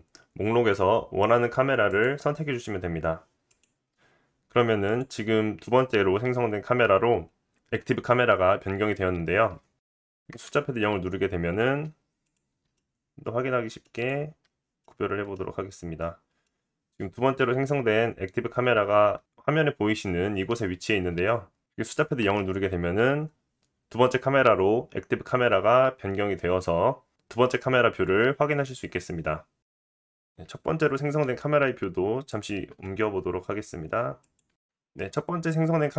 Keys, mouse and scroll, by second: 3.6-4.8 middle drag, 4.8 click, 5.0-7.9 middle drag, 10.3 KP_0, 11.6-12.7 middle drag, 11.6 g, 12.6 g, 13.0 middle click, 13.2-19.1 middle drag, 15.3-16.0 scroll down 3, 23.4 KP_0, 30.0 click, 30.6-32.7 typing, 32.5-33.7 middle drag, 33.7 click, 33.8-35.9 middle drag, 33.8 r, 34.1 g.